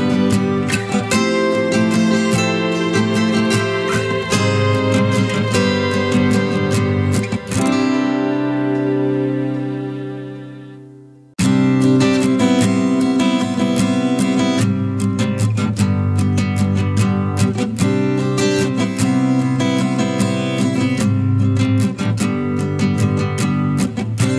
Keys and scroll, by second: 0.8 ctrl+z, 10.2-11.3 ctrl+space, 22.0 ctrl+z.